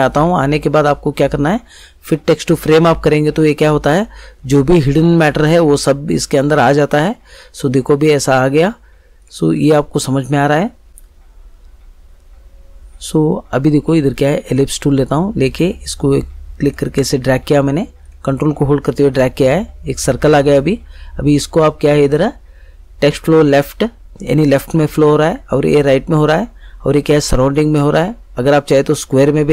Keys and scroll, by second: 10.9 ctrl+z.